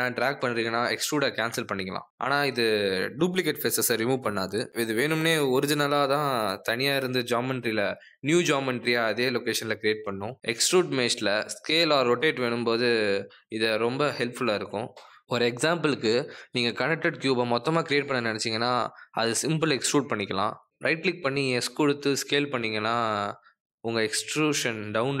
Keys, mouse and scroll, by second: 1.4 click, 2.8 click, 10.5 click, 11.0 s, 14.1 click, 24.2 click.